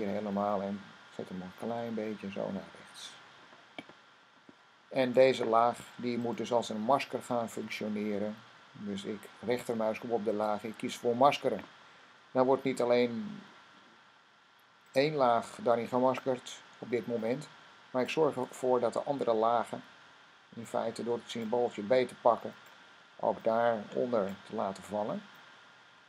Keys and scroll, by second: 1.5 Left, 1.8 Left, 1.9-2.3 typing.